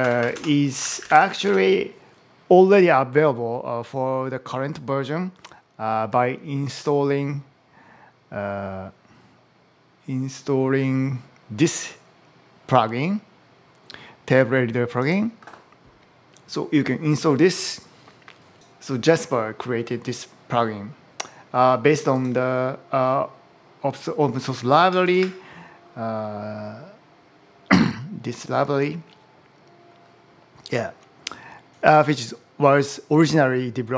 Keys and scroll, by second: 0.0-1.6 typing.